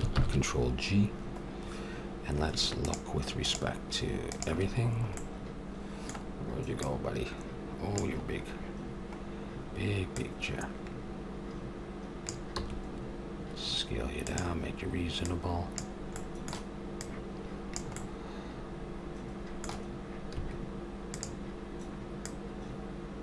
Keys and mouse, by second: 0.1 ctrl+g, 2.8-6.1 drag, 6.1 middle click, 6.8-8.7 drag, 8.7-10.1 middle drag, 10.1-12.1 drag, 12.6 s, 15.3 click, 16.2-18.8 middle drag, 18.0 click, 18.6 click, 19.1-20.4 middle drag, 20.4 s, 22.2-23.2 drag.